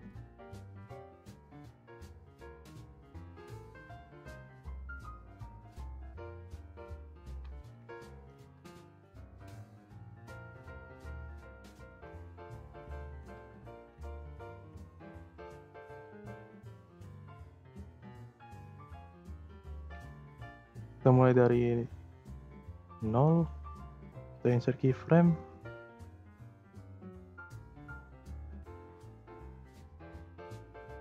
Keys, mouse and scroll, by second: 4.7-5.1 scroll down 2, 5.1 click, 5.7-6.8 scroll up 1, 6.8 click, 7.7 0, 10.4-12.4 drag, 12.4 0, 14.3 click, 16.1 click, 16.4 click, 16.9-18.7 scroll up 8, 18.7-20.4 drag, 20.4-21.2 scroll up 2, 21.2-22.3 scroll up 1, 22.3-27.1 right drag, 27.1-30.1 drag.